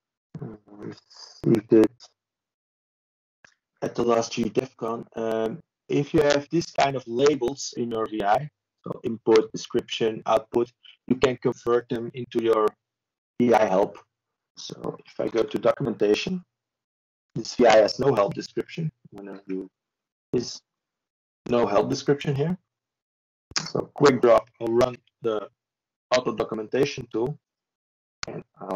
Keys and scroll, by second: 3.3 ctrl+space, 4.3-6.8 typing, 7.9-9.2 typing, 13.8 ctrl+v.